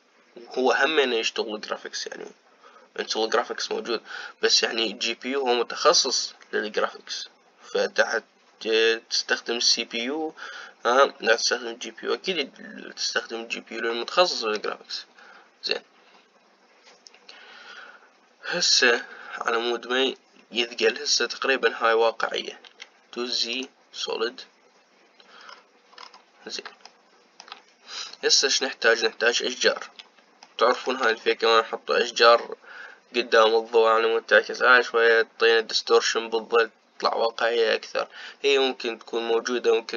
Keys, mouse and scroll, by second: 23.3 z, 26.1-27.6 scroll down 6, 27.6-30.6 shift+middle drag, 30.6-31.2 scroll up 1, 31.2-34.3 shift+middle drag.